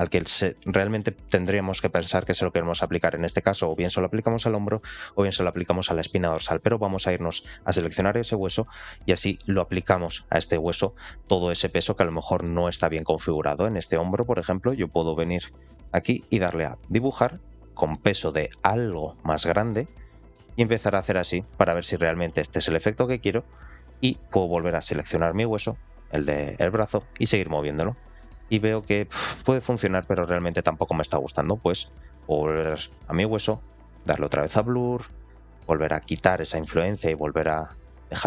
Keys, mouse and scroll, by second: 9.7 ctrl+click, 10.5-11.5 middle drag, 11.9 middle click, 12.8 middle click, 13.4-13.7 scroll up 1, 14.3 middle click, 16.6 click, 17.7-19.2 drag, 19.9-21.1 drag, 21.3 middle click, 22.4-22.8 scroll down 1, 24.9 ctrl+click, 26.5 r, 27.5 click, 31.3 ctrl+z, 31.9 middle click, 34.0 click, 34.9-38.2 drag.